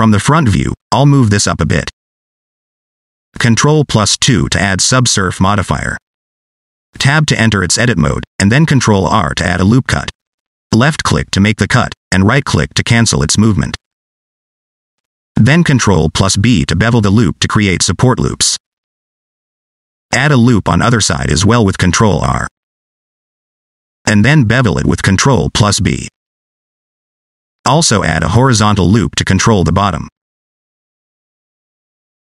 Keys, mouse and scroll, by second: 0.5 scroll up 2, 1.1 click, 3.0 scroll down 1, 3.1 middle click, 3.5 shift+middle click, 3.8 middle click, 4.2 shift+middle click, 6.2 ctrl+2, 7.4 Tab, 8.9 ctrl+r, 12.7 middle click, 14.0 ctrl+b, 18.7 middle click, 20.2 ctrl+r, 25.3 ctrl+b, 27.0 middle click, 27.4 scroll up 1, 27.6 middle click, 28.4 ctrl+r.